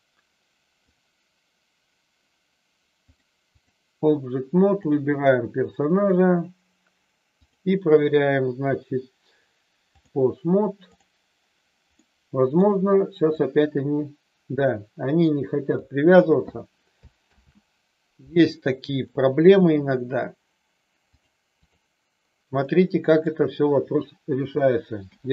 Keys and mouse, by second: 0.8-2.0 drag, 3.1 click, 4.7 click, 6.1 click, 7.6-10.1 drag, 12.1 middle click, 13.3-15.7 drag, 17.2 ctrl+z, 18.9 middle click, 21.2 click, 22.7 middle click, 25.0 h.